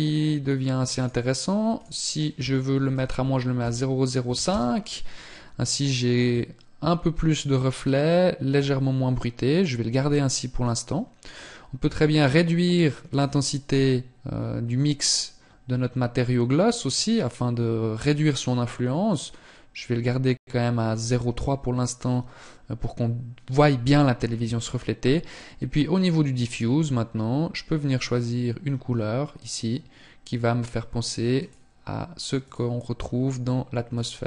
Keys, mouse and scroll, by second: 12.8 click.